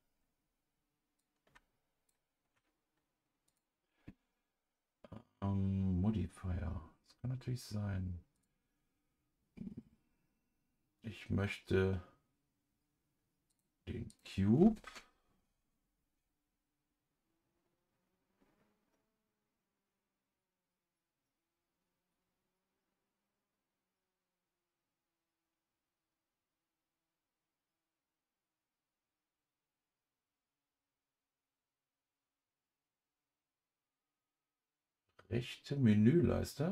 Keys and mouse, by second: 1.2 click, 3.5 click, 8.3 click, 13.5 click, 14.1-34.5 drag.